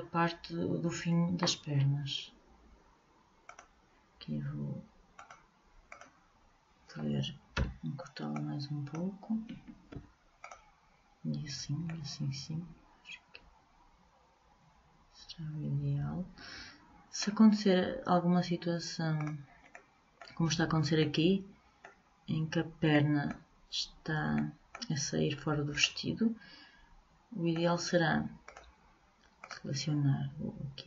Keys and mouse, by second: 3.6-7.1 drag, 7.7 b, 10.1 Delete, 11.7 middle click, 19.3-21.2 drag, 21.2 middle click, 27.3-28.6 middle drag.